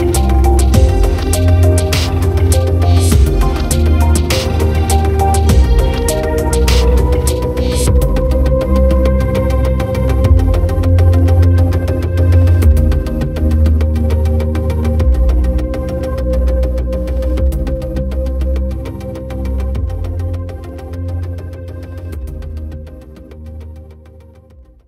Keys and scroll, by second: 0.0-1.8 typing, 5.0 ctrl+t.